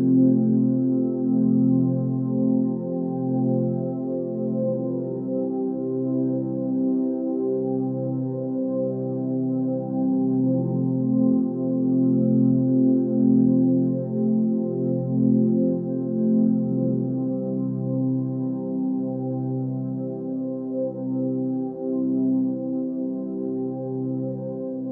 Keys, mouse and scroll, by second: 0.8 ctrl+z, 6.9 click, 7.7 ctrl+z, 9.7 ctrl+space, 14.4 ctrl+space, 15.5 click.